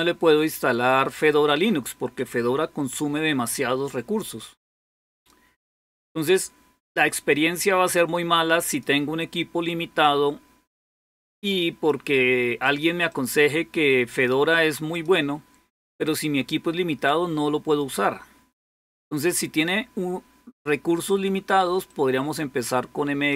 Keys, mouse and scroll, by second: 2.0-4.7 drag, 5.0-9.4 drag, 9.8-15.7 drag, 21.7-23.3 drag.